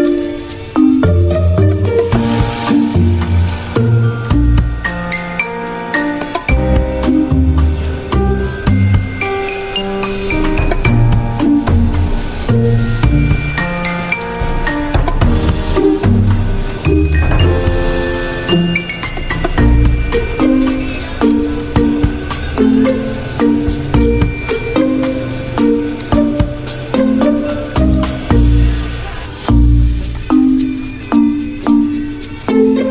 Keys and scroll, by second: 5.0 ctrl+g, 24.7 ctrl+g.